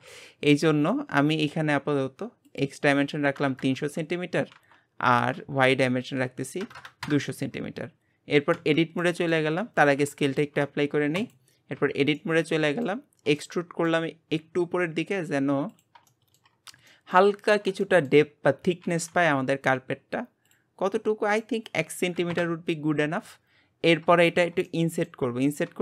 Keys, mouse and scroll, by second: 0.9-2.5 middle drag, 2.5-3.6 drag, 3.6 KP_0, 5.5 KP_0, 7.9-8.5 scroll down 2, 8.5 Tab, 9.0 middle click, 9.6 Tab, 10.3 ctrl+a, 11.8 Tab, 12.1 middle click, 13.1 scroll up 1, 13.4-14.4 shift+middle drag, 14.4 e, 16.2 shift+middle click, 16.5-16.9 scroll up 3, 16.9 shift+middle click, 17.4-17.8 scroll up 2, 17.8 shift+middle click, 18.3-18.8 scroll up 1, 18.8 g, 21.3 click, 23.6-24.3 scroll down 9, 24.3-25.8 shift+middle drag.